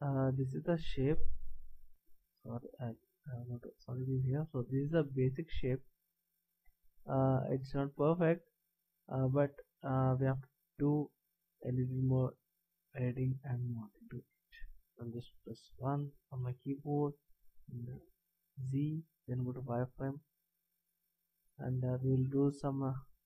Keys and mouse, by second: 0.4-1.9 middle drag, 1.9 shift+z, 2.5 z, 5.7 middle click, 8.0-9.2 middle drag, 16.0 KP_1, 18.0 z.